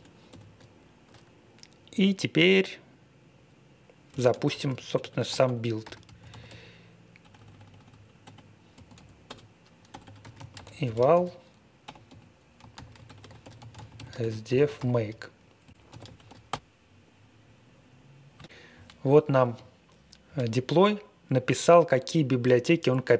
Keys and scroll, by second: 0.0-0.2 typing, 4.1-16.3 typing, 16.4 Return.